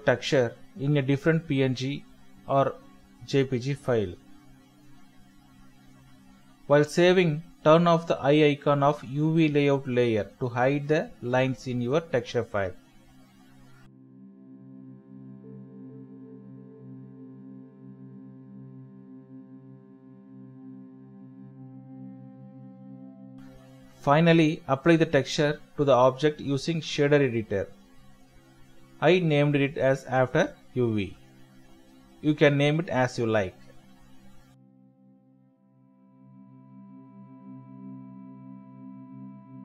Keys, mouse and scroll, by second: 1.3 typing, 2.1 alt+shift+click, 4.2 shift+F7, 4.6-5.5 typing, 5.1 ctrl+KP_0, 7.3-7.7 typing, 8.0 ctrl+d, 8.5 Escape, 10.0 ctrl+s, 13.7 ctrl+shift+s, 14.6 Tab, 14.9 typing, 20.2 alt+Tab, 20.5 alt+Tab, 20.6 alt+Tab, 26.3 double click, 27.1 middle click, 31.5 middle click, 33.1 typing, 35.5 right click, 35.8 typing, 38.3 right click, 38.9 middle click.